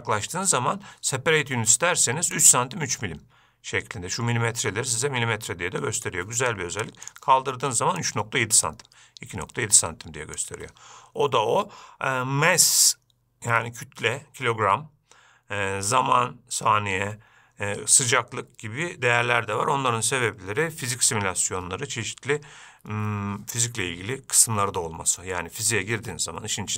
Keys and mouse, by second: 2.7-6.4 shift+drag, 7.4 click, 8.3-10.9 shift+drag.